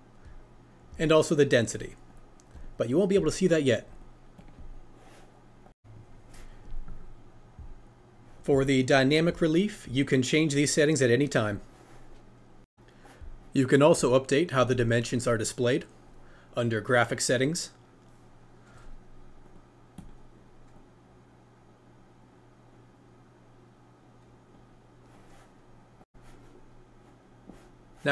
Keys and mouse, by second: 2.1 click, 2.5 click, 4.0-20.0 drag, 20.7-24.5 drag.